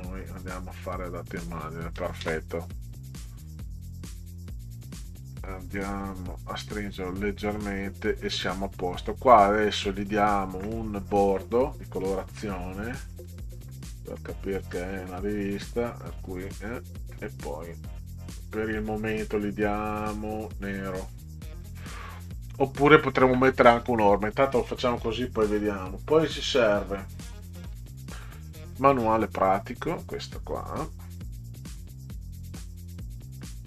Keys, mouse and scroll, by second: 0.3 click, 4.8 click, 5.4 click, 6.9-7.9 drag, 9.4 click, 13.3 click, 14.6 click, 16.2 click, 21.1 click, 24.7 click, 27.8-30.0 drag, 31.6 click, 32.5 click.